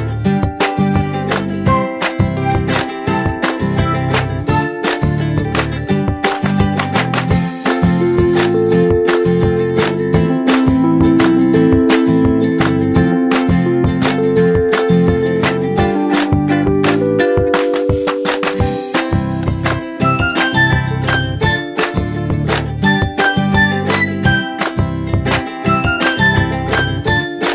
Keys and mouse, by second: 1.0 click, 3.9 click, 6.6 click, 12.1 m, 13.6 click, 24.9 click.